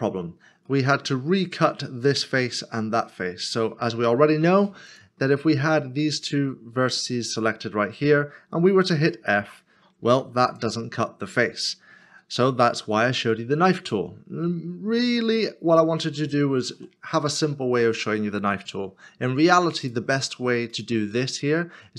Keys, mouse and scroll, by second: 0.1 scroll down 1, 0.8 middle click, 6.9 shift+click, 9.9 f, 10.0 3, 12.0 ctrl+z, 12.5 ctrl+z, 13.1 ctrl+z, 14.3 scroll up 1, 15.5 shift+middle click, 21.4 shift+middle click.